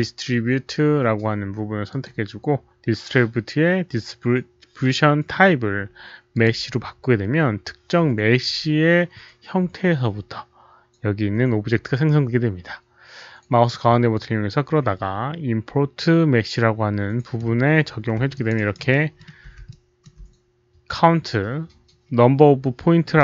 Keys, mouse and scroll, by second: 1.8 ctrl+click, 3.6 ctrl+click, 3.6 alt+middle click, 3.6 alt+right click, 5.3 ctrl+click, 5.3 alt+middle click, 6.3 click, 9.0 ctrl+click, 10.6 click, 13.6-17.3 middle drag, 17.4-17.7 scroll up 1, 18.3 alt+click, 18.3 middle click, 18.5 alt+right click, 18.8 alt+middle click, 19.5 alt+right click, 19.5 alt+click, 19.6 alt+middle click, 19.8 alt+right click, 19.8 alt+click.